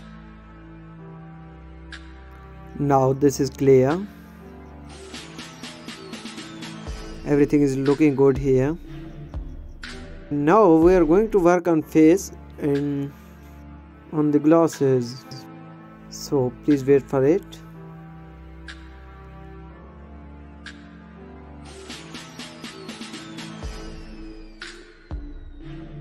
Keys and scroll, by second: 4.6 space, 10.8 space, 12.5 space, 13.0 space, 13.5 space, 17.6 space.